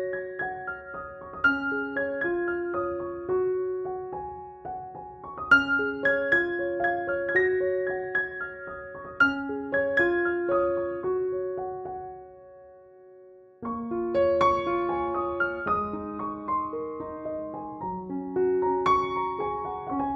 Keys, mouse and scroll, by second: 0.8 ctrl+click, 1.1 ctrl+e, 1.9 ctrl+j, 2.5 alt+BackSpace, 3.2 ctrl+u, 4.1-4.7 drag, 5.4 alt+t, 6.2 click, 9.8 click, 11.8 alt+t, 12.7-16.2 drag.